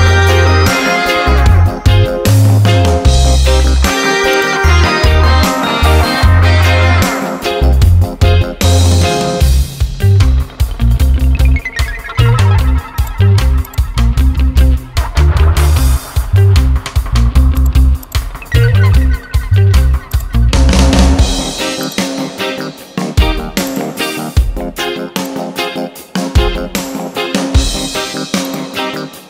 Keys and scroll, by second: 2.6 ctrl+a, 7.8 BackSpace, 11.4 Return, 18.2 ctrl+a, 25.9 ctrl+t.